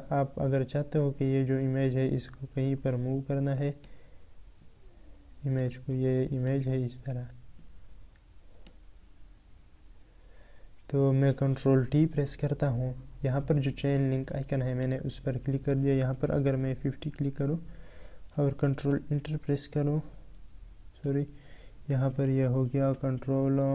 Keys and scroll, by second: 11.5 ctrl+t, 18.7 ctrl+', 22.6 ctrl+'.